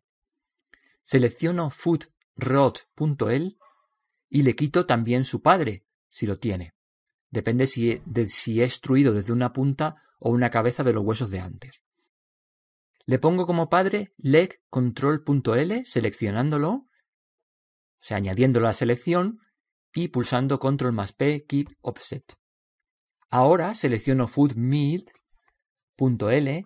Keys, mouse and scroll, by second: 3.5 right click, 6.1 click, 17.2 right click, 20.0 ctrl+p, 25.5 right click.